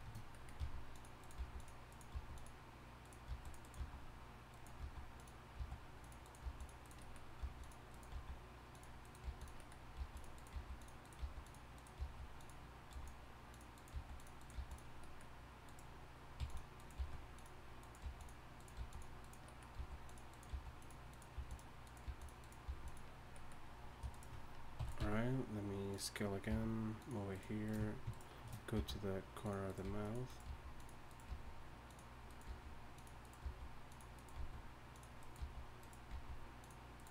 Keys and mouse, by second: 0.6 g, 1.4 g, 2.1 g, 3.3 g, 5.5 g, 6.4 g, 7.4 g, 8.1 g, 9.2-14.5 typing, 15.6-17.0 right drag, 16.4 g, 17.0 g, 18.0-22.6 typing, 18.6 click, 24.8 e, 25.0 s, 26.5 g, 27.3-30.8 right drag, 28.8 g, 29.8 g, 30.4 g, 31.3 g, 32.5 g, 33.4 g, 34.4 g, 36.1 g, 36.9-37.1 right drag.